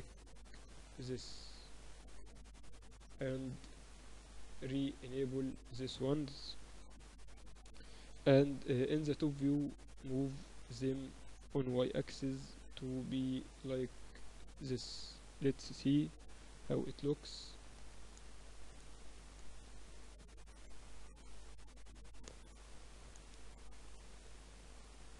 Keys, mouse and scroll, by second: 4.5-6.0 middle drag, 6.0 right click, 6.8 KP_Divide, 7.2 middle click, 8.1 KP_7, 11.6 g, 12.8 middle click, 16.2 KP_Divide, 16.8 KP_6, 17.0 KP_6, 17.2-17.6 KP_2, 18.1 Tab, 18.3 z, 20.6 Tab, 21.0 Tab, 21.5 Tab, 22.7 KP_6, 22.8 KP_6.